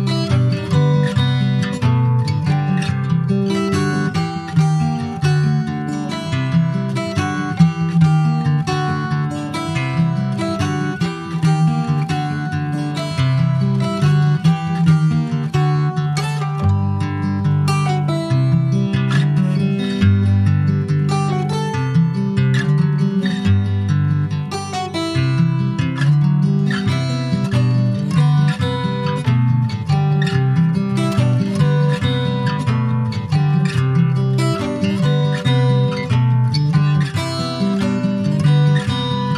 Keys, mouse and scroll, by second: 3.9 ctrl+z, 4.8 ctrl+r, 9.1 3, 9.4 click, 10.0 shift+click, 10.5 shift+click, 10.8-12.1 middle drag, 12.1 ctrl+s, 12.5 e, 16.7-21.8 drag, 21.8-22.8 middle drag, 23.2 click, 23.8 click, 24.3 shift+click, 25.0 middle click, 25.6 e, 27.8-30.6 drag, 31.1 click, 31.6-33.0 shift+middle drag, 33.0 e, 35.0 click, 36.0-39.0 drag, 39.2 click.